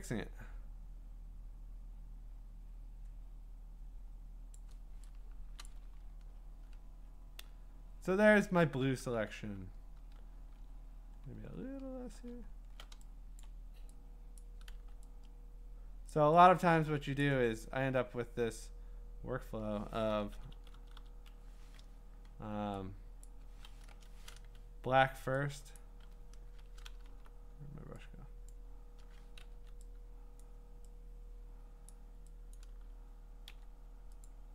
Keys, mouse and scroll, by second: 4.6 click, 5.4 click, 5.5 click, 5.6 click, 6.0-7.0 scroll, 7.0 scroll down 11, 7.9 scroll up 5, 8.2 scroll down 2, 9.3-10.0 typing, 9.4 scroll up 19, 10.7-11.9 scroll up 17, 11.9-12.7 scroll, 13.4 click, 14.4 click, 14.8 x, 16.1 click, 17.2 click, 17.9 s, 20.3 [, 20.5 [, 20.7 [, 21.0 [, 23.2 click, 23.9 Return, 25.1 x, 25.8 click, 26.5 Return, 27.1 b, 28.5 click, 29.5 x, 30.4 click, 31.9 click, 32.5 click, 33.5 x, 34.2 click.